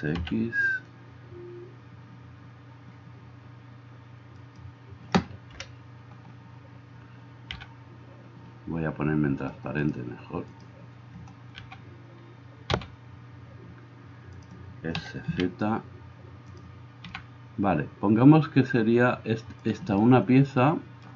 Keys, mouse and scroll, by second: 5.6 KP_1, 7.5 g, 11.6 g, 12.8 g, 14.9 s, 17.1 g.